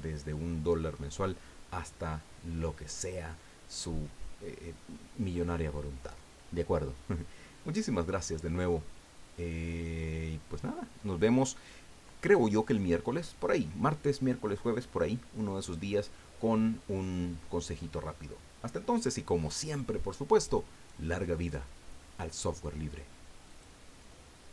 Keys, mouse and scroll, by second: 23.5 click.